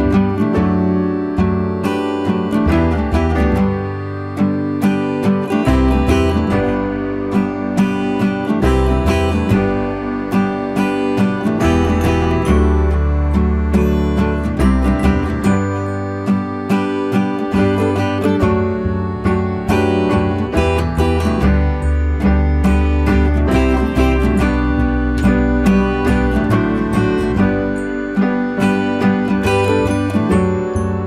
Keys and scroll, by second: 26.8 ctrl+t.